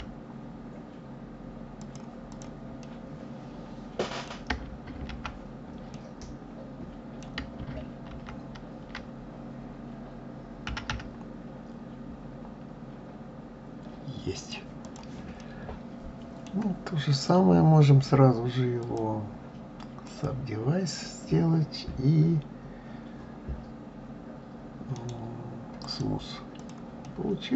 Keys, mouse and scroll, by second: 2.1 click, 2.6-5.0 middle drag, 5.0 ctrl+z, 5.7-8.1 middle drag, 8.1 ctrl+z, 10.4 g, 14.5 click, 15.1-16.9 middle drag, 16.9 click, 18.6-21.6 drag, 25.8-26.3 right drag, 26.3 click, 26.8-27.5 middle drag.